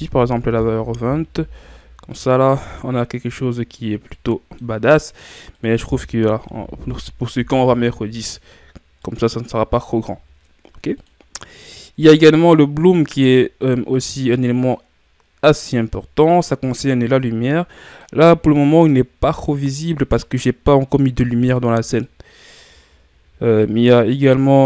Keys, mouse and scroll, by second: 0.9 click, 1.9 scroll down 2, 2.1-7.5 middle drag, 7.5-9.0 drag, 9.0-12.5 middle drag, 12.5 click, 13.6-24.6 middle drag.